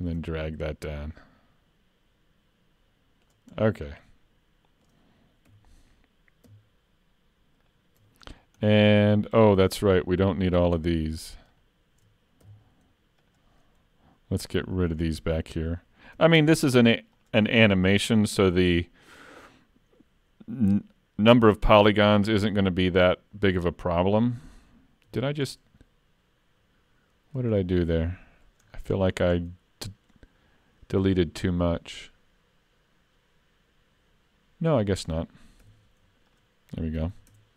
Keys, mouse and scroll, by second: 1.1 click, 3.6 scroll down 2, 3.9 middle click, 5.5 3, 7.6 alt+click, 8.3-8.6 scroll down 2, 8.6 middle click, 10.4 click, 11.5 shift+click, 12.5 x, 13.6 middle click, 14.7-15.0 scroll up 4, 15.0 shift+middle click, 15.4 middle click, 17.2 alt+click, 18.3 x, 21.4 middle click, 25.1 ctrl+z, 25.5 middle click, 27.6-28.0 scroll up 3, 27.8 middle click, 28.7 scroll down 3, 29.0 shift+middle click, 29.4 middle click, 30.8 middle click, 30.8 shift+middle click, 35.6 x, 37.1 alt+a, 37.3 Tab.